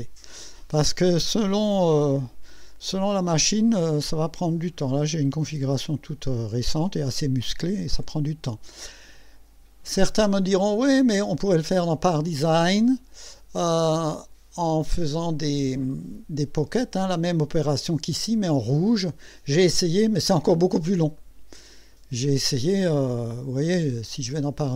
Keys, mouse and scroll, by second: 12.8 click, 21.2 right click, 23.3 click, 24.3 click.